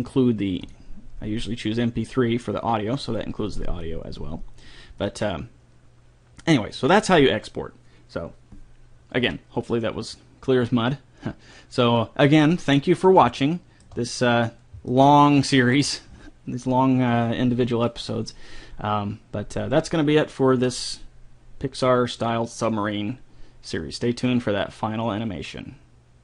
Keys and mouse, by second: 2.9 middle click, 5.0-8.5 drag, 8.3-11.3 middle drag, 11.8-13.0 middle drag, 13.0 click, 13.8-25.5 middle drag.